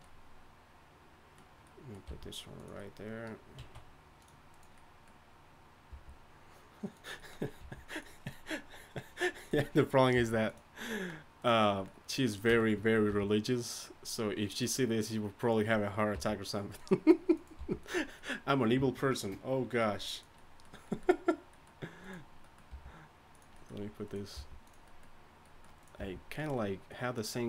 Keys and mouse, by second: 2.5 g, 3.6 s, 5.9 g, 7.6 g, 10.1 g, 13.1 r, 16.1 g, 17.6 g, 22.7 g, 24.3 g, 26.0 g.